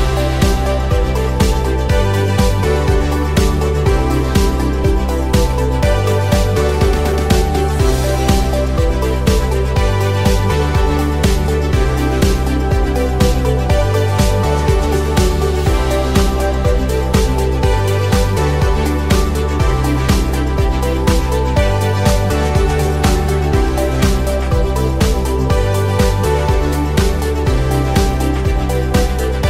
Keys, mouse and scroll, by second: 1.5 click, 2.3 2, 2.9 click, 4.0 middle click, 5.1 click, 6.1 click, 6.7 click, 7.7-10.2 middle drag, 10.9 click, 11.6 click, 12.5 middle click, 13.7 1, 14.2 click, 14.9-16.7 drag, 17.0-19.1 middle drag, 19.1-19.9 scroll up 2, 19.9 2, 20.3 click, 21.0 click, 22.1-28.5 middle drag, 28.6-29.0 scroll down 2, 29.0 Tab.